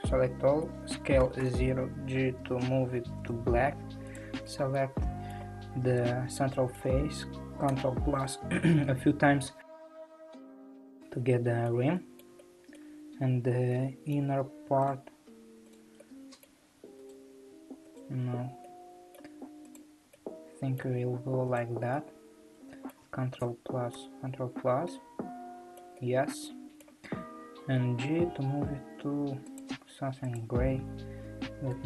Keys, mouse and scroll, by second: 0.7 g, 4.2 click, 4.4-5.4 middle drag, 5.4 3, 6.1 click, 6.4-7.7 middle drag, 7.7 ctrl+KP_Add, 8.2 ctrl+KP_Add, 11.0-13.3 middle drag, 13.3 scroll up 3, 13.7-14.9 shift+middle drag, 14.9 shift+click, 15.7 shift+click, 16.0-17.1 middle drag, 17.1 alt+click, 18.0 click, 18.6-19.9 middle drag, 19.9 click, 20.1-21.6 middle drag, 21.6 shift+click, 21.9-23.4 middle drag, 23.4 ctrl+KP_Add, 23.9 ctrl+KP_Add, 24.8-27.9 middle drag, 27.9 g, 30.4 click.